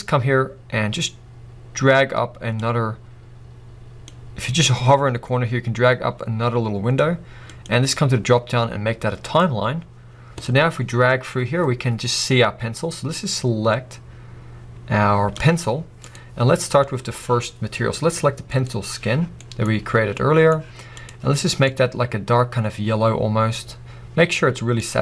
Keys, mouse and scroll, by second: 1.4 click, 5.3-9.7 drag, 10.6-16.2 drag, 18.5 click.